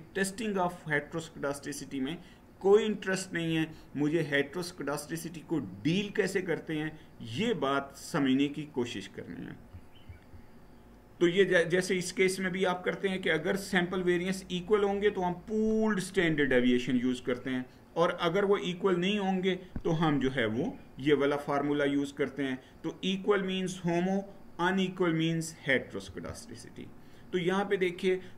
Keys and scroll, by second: 9.8 Right, 25.8 Down.